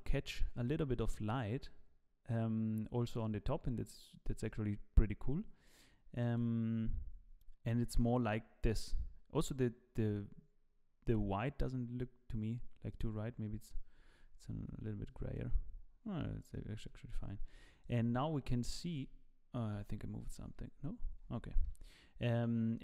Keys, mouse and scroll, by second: 13.9-14.5 scroll down 6, 14.7 ctrl+b, 16.1 scroll down 1, 16.5 shift+middle click, 17.3 ctrl+b, 18.9 ctrl+b, 20.5 ctrl+z, 21.6 ctrl+b.